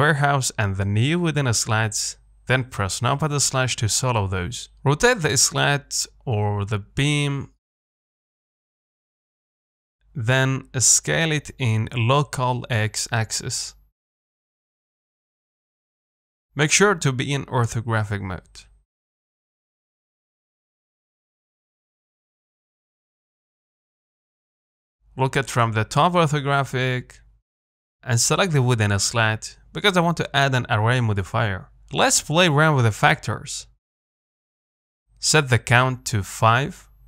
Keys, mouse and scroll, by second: 0.1 middle click, 0.8 shift+click, 1.8 KP_1, 2.8 KP_Divide, 3.9 click, 4.8 r, 6.8 g, 7.5 Tab, 8.8 Tab, 9.1 Tab, 9.5-11.0 middle drag, 11.0 s, 15.1 KP_1, 16.9 s, 21.9-24.6 middle drag, 25.4 KP_7, 26.1 Tab, 26.8 g, 30.7-37.0 drag.